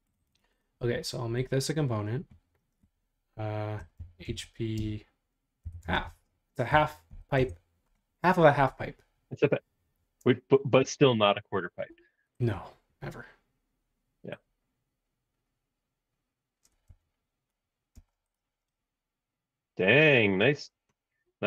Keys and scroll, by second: 4.0-7.9 typing, 18.1 space.